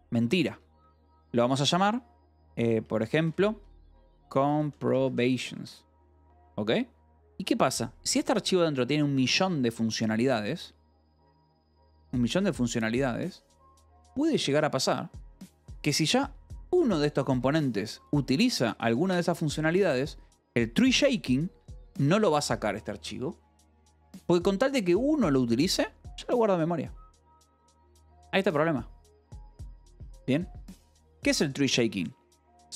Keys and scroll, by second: 0.0-5.9 typing, 0.3 Escape, 7.7 shift+v, 16.5 j, 17.3 k, 19.0 ], 21.5 Escape.